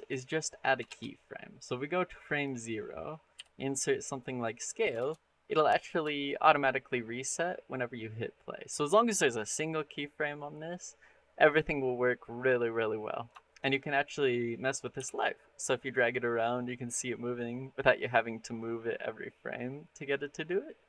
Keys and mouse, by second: 0.7 shift+space, 1.5 click, 3.2 i, 4.8 shift+space, 6.0 shift+drag, 13.3 shift+middle click, 13.9 click, 14.8 r.